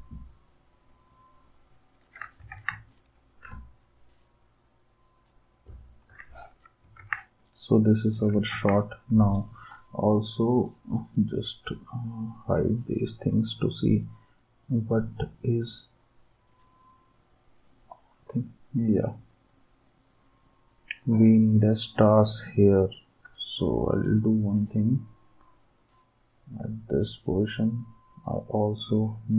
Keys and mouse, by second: 2.5 ctrl+s, 7.0 ctrl+s, 8.5 ctrl+s.